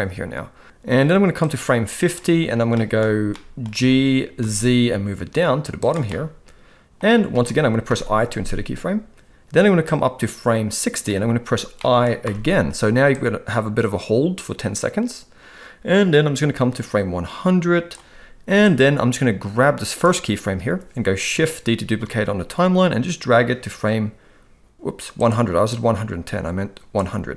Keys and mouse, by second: 1.4 click, 2.8 middle click, 3.3-3.6 middle drag, 3.7 g, 6.0-6.9 middle drag, 7.8 i, 9.8-11.0 drag, 11.8 middle click, 12.2 i, 13.1-17.9 drag, 18.6 click, 18.8-20.1 drag, 22.0 shift+d, 25.6-26.9 drag.